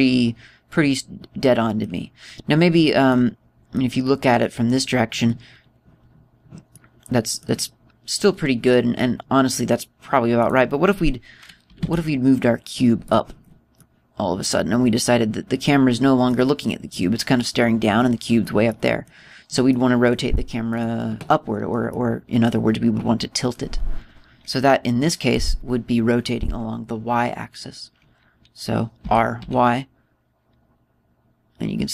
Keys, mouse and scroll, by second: 3.9 middle click, 5.0 middle click, 6.3-6.7 scroll up 2, 6.8-7.5 scroll down 4, 7.5 middle click, 11.2 right click, 12.5 g, 14.1 click, 14.6 middle click, 19.5 middle click, 20.5 middle click, 21.5 right click, 22.7 middle click, 29.9 r.